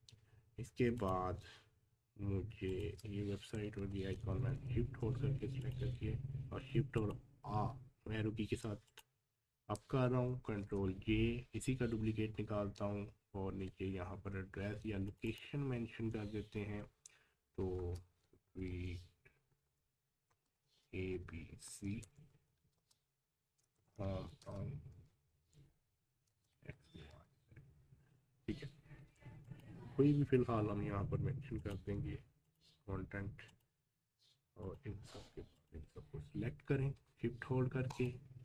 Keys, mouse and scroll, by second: 1.0 click, 2.7 shift+click, 3.7 shift+Up, 5.6 click, 10.4 ctrl+j, 11.9 shift+Down, 13.3 Down, 15.1 click, 17.8 shift+s, 18.2 t, 20.3 space, 20.6 shift+a, 21.0 b, 22.8-26.5 typing, 29.4 click, 31.6 click.